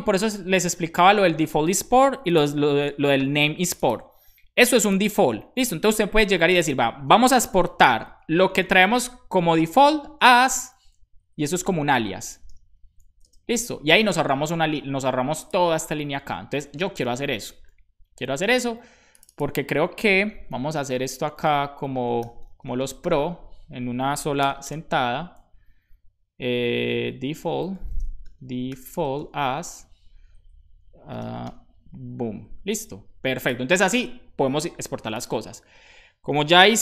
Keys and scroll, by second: 7.8-9.3 typing, 13.0 Left, 13.2 space, 13.5 super+s, 15.8 super+Right, 17.1 super+s, 20.5 super+d, 22.2-24.7 typing, 27.1-29.4 typing, 30.1 alt+Right, 31.2 space, 31.5 shift+], 32.6 super+s, 36.6-36.8 typing.